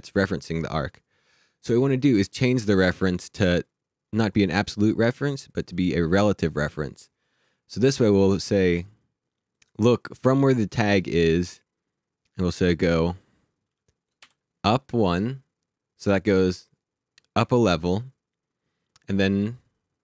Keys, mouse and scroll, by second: 4.0 click, 8.9 click, 12.9 click, 14.2 shift+u.